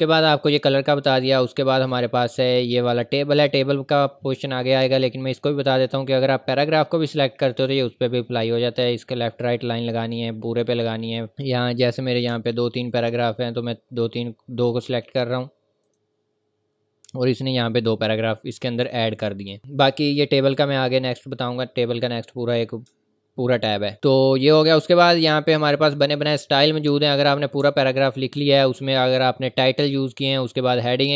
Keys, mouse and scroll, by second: 1.9 click, 5.8 click, 11.3 click, 11.7-12.3 scroll down 1, 12.4 scroll down 1, 13.0-13.5 scroll up 1, 13.7 click, 20.8 click, 22.9 ctrl+scroll up 1, 23.7 scroll up 1, 23.9-24.7 scroll down 1, 27.0 scroll down 1, 27.4 scroll up 1, 27.7-28.0 scroll down 1, 28.4 scroll up 1, 28.8 click.